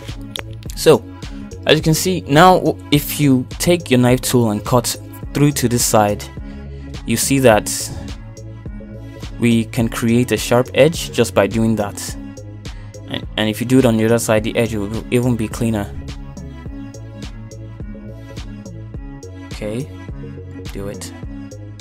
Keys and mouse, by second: 0.1 shift+middle click, 0.6 middle click, 4.3 k, 12.4 middle click, 15.7 middle click, 16.7 k, 18.8 middle click, 19.3 shift+middle click, 20.2 middle click, 20.5 k.